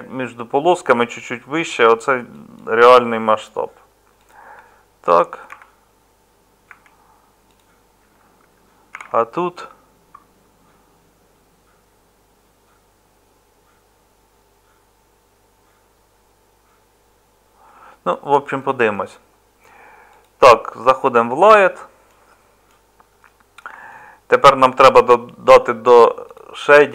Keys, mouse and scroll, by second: 20.2 Tab.